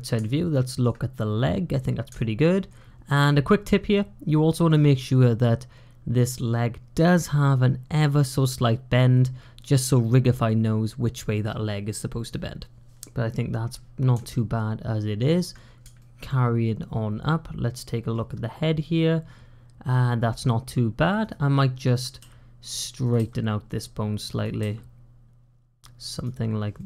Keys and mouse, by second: 0.2 shift+middle click, 2.1 shift+middle click, 14.2 shift+middle click, 15.8-18.0 shift+middle drag, 21.1 click, 22.1 g, 23.1 r, 24.2 click, 24.4 g, 26.6-26.8 drag.